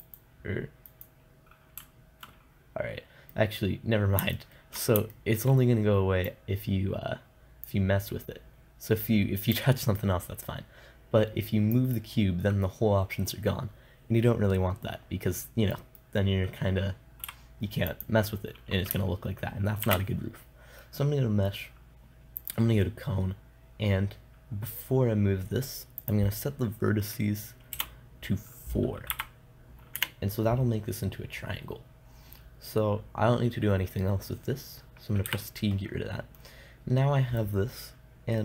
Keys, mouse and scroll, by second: 3.4-6.7 middle drag, 6.7-12.2 drag, 15.6 middle click, 17.7 x, 20.3 shift+a, 26.6-29.3 drag, 35.7 t, 36.3-38.4 middle drag.